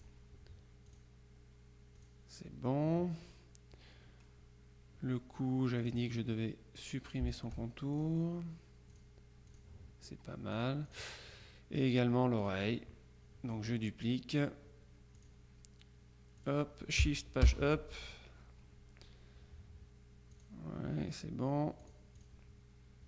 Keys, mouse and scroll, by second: 0.9 click, 2.1 click, 5.9 click, 7.4-8.6 shift+drag, 9.0-10.1 drag, 10.6 click, 12.5 click, 15.3 click, 16.5 click, 17.5 shift+Page_Up, 20.4 click, 21.9 click.